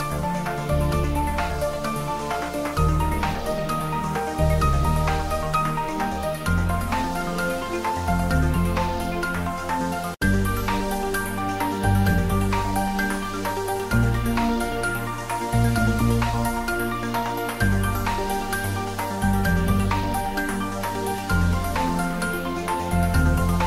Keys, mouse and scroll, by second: 0.3 click, 2.8 ctrl+z, 6.2 click, 6.7 ctrl+b, 14.4 click, 14.7 ctrl+z, 16.1 g, 17.6 click, 17.9 ctrl+b, 22.4 scroll down 1.